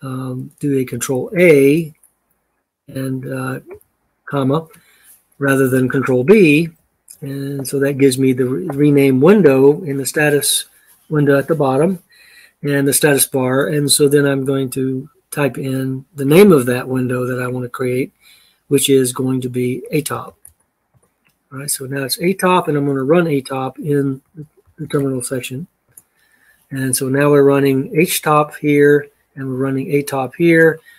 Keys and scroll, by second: 1.0 ctrl+a, 3.4 ɿ, 6.9 BackSpace, 7.3 BackSpace, 8.5 BackSpace, 19.8-20.7 typing, 24.4-25.2 typing, 25.6 Return.